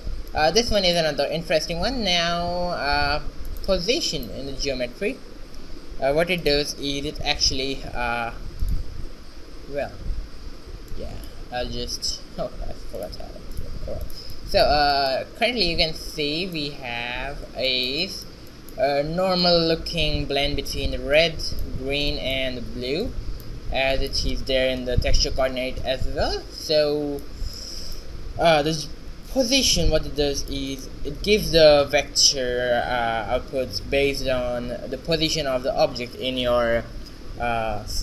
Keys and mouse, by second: 0.0 shift+z, 1.7 g, 4.1 middle click, 4.6 shift+a, 4.8 middle click, 7.7 ctrl+2, 8.2 z, 8.7 middle click, 9.4 shift+z, 10.6 ctrl+b, 14.1 click, 15.4 q, 17.2 ctrl+alt+b, 28.2 q, 30.3 middle click, 30.8-32.7 right drag.